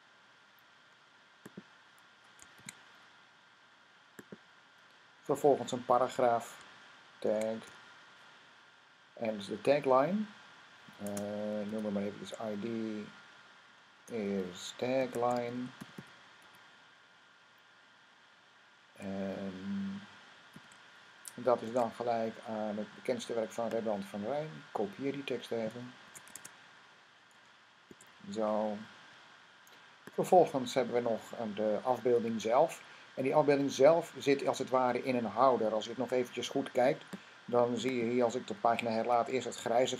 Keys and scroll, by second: 2.4 n, 7.1-7.6 typing, 11.3 typing, 14.6-16.7 typing, 20.4 typing, 21.4 Tab, 24.3 typing, 25.9 c, 26.2 Tab, 27.7 typing, 35.8 Tab, 38.8 r.